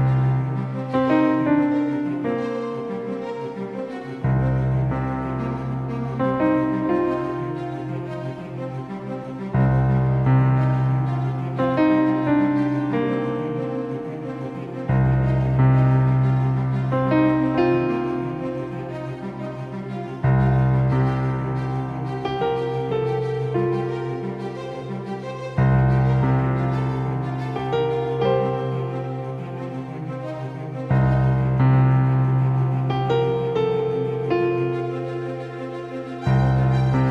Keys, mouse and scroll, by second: 0.4-2.6 drag, 1.8 s, 5.1-7.8 drag, 10.8 KP_3, 11.4 KP_1, 12.9 KP_3, 21.9-25.1 middle drag, 25.4 r, 28.2-30.4 drag, 34.3 s.